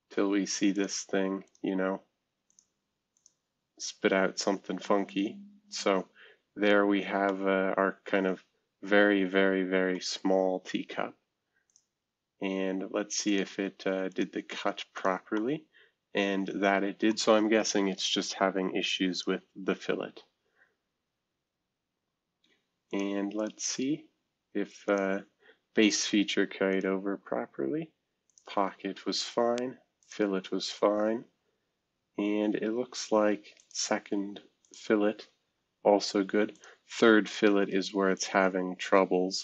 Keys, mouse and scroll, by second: 0.7 click, 1.4 click, 1.8 space, 2.5 click, 2.7 space, 3.1 click, 7.2-11.4 middle drag, 11.6 click, 12.6 space, 13.2 click, 13.7 space, 14.1 click, 14.4 space, 15.4-17.9 middle drag, 17.9 click, 18.3 space, 19.1 click, 19.4 space, 21.1-22.6 scroll down 1, 23.7 space, 24.8 click, 25.8 click, 26.7 click, 27.0 space, 28.2 click, 28.7 space, 30.0 click, 30.6 space, 33.5 click, 34.6 click, 35.4 space, 36.5 click, 37.2 click, 37.6 right click, 37.7 click, 38.1 click.